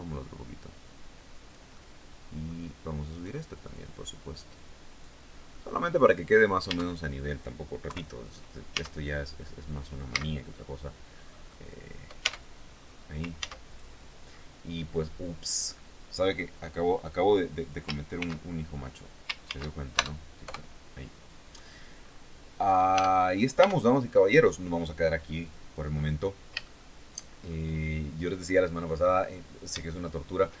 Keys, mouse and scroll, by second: 1.3 middle click, 2.7 right click, 3.3-4.7 drag, 5.1 middle click, 5.8 scroll down 1, 6.2 Tab, 7.4 KP_3, 8.3 Tab, 8.5-9.1 scroll down 1, 9.7 z, 10.1-10.6 scroll down 1, 10.7-11.3 scroll up 1, 11.7 Tab, 12.1-12.7 scroll down 1, 12.9 ctrl+s, 13.3 ctrl+click, 13.9-14.2 scroll down 2, 17.7 ctrl+shift+x, 19.0 ctrl+shift+s, 19.5 ctrl+shift+KP_Add, 20.0 ctrl+shift+KP_Enter, 21.5-22.0 scroll up 2, 22.1-22.5 scroll down 2, 22.5 Tab, 23.1 Tab, 23.5-23.9 scroll down 2, 25.5 scroll up 2, 26.1 shift+middle click, 26.2 shift+scroll up 2, 28.2 scroll down 2, 29.4 shift+middle click.